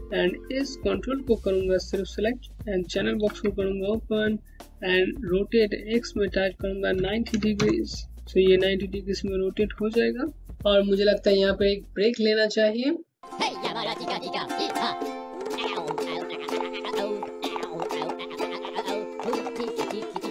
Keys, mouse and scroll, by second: 1.2 click, 2.8 alt+c, 5.5 click, 6.5 KP_9, 6.9 KP_0, 7.1 KP_Enter, 8.3 Home, 8.3 alt+click, 10.5 KP_Enter, 11.1 Home, 11.1 click.